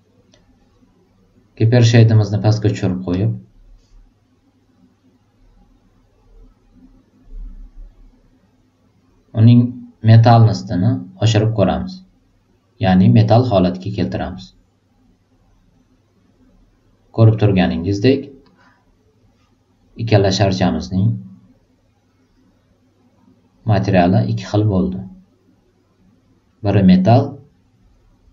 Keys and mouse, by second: 3.0 click, 10.3-13.8 drag, 18.3 click, 21.3-24.2 drag.